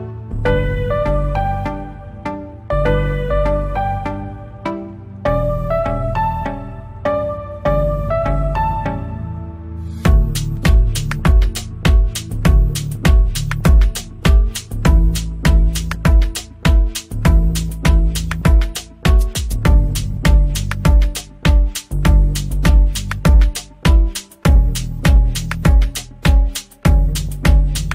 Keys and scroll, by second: 0.2 shift+Page_Up, 1.9 c, 2.5 Escape, 7.1 F2, 8.0 Escape, 12.6 ctrl+space, 12.9 F3, 13.7 c, 14.2 Escape, 16.7 F3, 19.3 F3, 19.7 Escape, 20.0 F2, 24.0 ctrl+u.